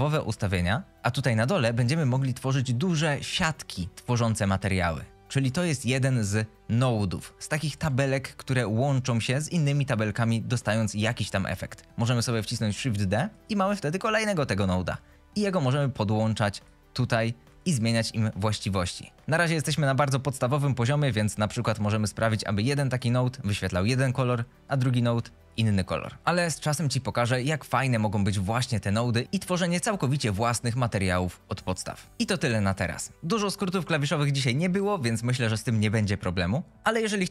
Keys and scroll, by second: 13.0 shift+d.